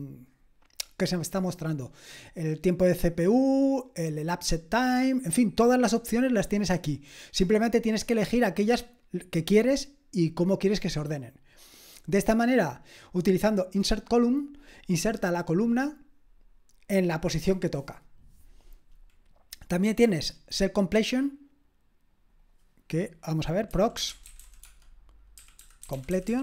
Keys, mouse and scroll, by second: 23.5-26.4 typing.